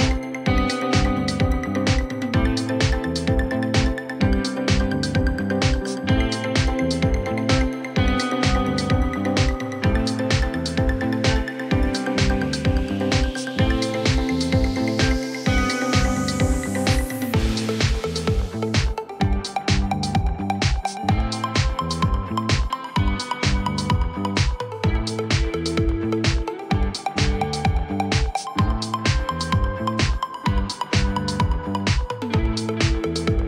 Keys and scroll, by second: 4.0 w, 7.4 alt+x, 8.6 alt+x, 10.8 alt+q, 12.1 alt+x, 12.3 F4, 13.0 4, 19.7 Delete, 22.1 1.